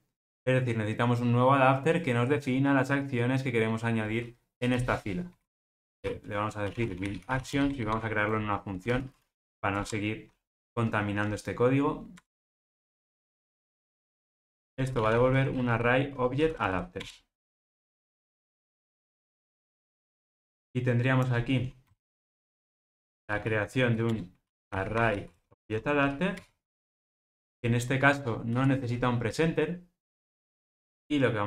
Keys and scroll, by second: 9.7 alt+Return, 14.5 super+a, 16.9 super+a, 24.1 Return.